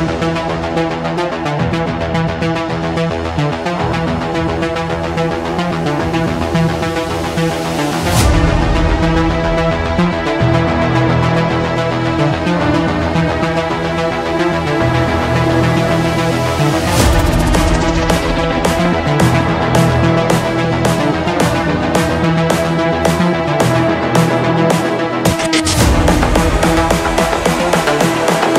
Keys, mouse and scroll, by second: 3.1-4.1 drag, 5.9-7.0 scroll, 7.0 click, 8.5-9.4 scroll, 9.4 click, 10.5 click, 11.6 middle click, 12.5 scroll, 13.3-14.2 scroll, 14.7 middle click, 14.9 scroll, 15.0 middle click, 15.1 middle click, 18.2 middle click, 18.2 middle click, 19.4 middle click, 20.0 middle click, 20.9-22.0 middle drag, 22.0-23.1 drag, 24.8-28.5 drag.